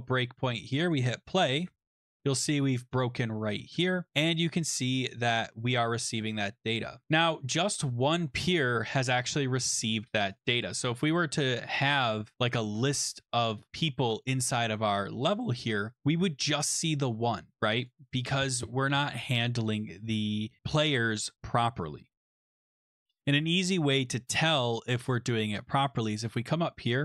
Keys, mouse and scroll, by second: 0.9 click, 2.0 click, 6.4 click, 6.9 click, 10.4 click, 11.7 click, 14.2 click, 17.8 click, 23.6 click, 26.1 click, 26.9 Page_Up.